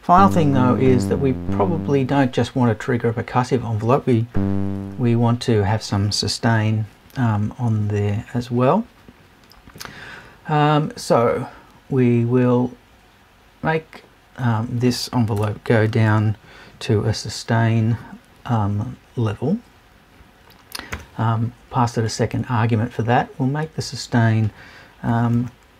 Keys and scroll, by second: 15.4 BackSpace, 15.9 shift+BackSpace, 25.1 BackSpace.